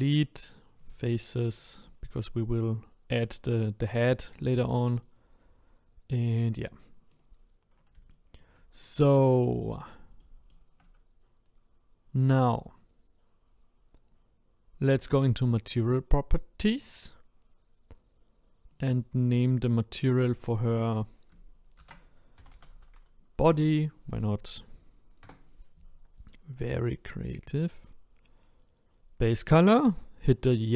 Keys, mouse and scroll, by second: 0.9 Delete, 1.5-5.0 middle drag, 5.0 click, 5.7-6.2 scroll down 1, 6.2-6.8 scroll up 1, 6.8 middle click, 7.4 scroll down 2, 8.1 shift+middle click, 8.7-9.2 scroll down 2, 9.2-10.2 scroll up 1, 10.2-19.3 shift+middle drag, 19.3-25.2 drag, 27.4-29.0 scroll down 1.